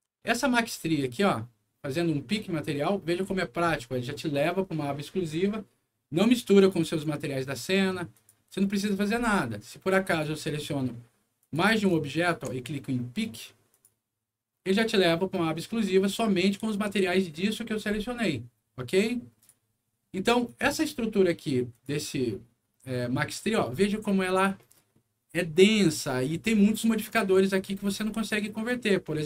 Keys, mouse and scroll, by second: 0.2-0.7 alt+scroll up 2, 1.1 alt+click, 2.7 alt+click, 6.5 click, 8.1 click, 9.8 click, 10.5 middle click, 11.3 click, 12.1 ctrl+click, 13.6 ctrl+click, 19.3 click, 20.4 click, 21.7 click, 23.6-24.2 scroll up 4, 24.5 middle click, 25.2 scroll down 1, 25.9 scroll up 1, 27.6-28.1 scroll up 1, 28.6 click.